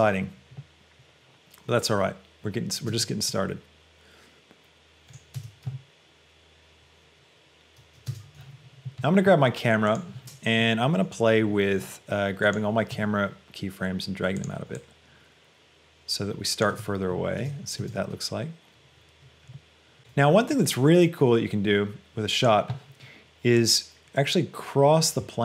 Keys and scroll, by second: 2.9 space, 5.5 space, 8.1 space, 16.9 space.